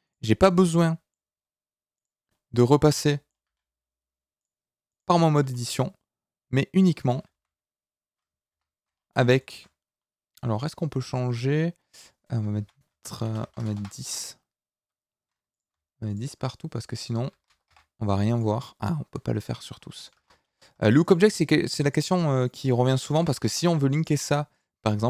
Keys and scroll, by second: 3.4 g, 7.3 s, 8.5 Escape, 13.4 BackSpace.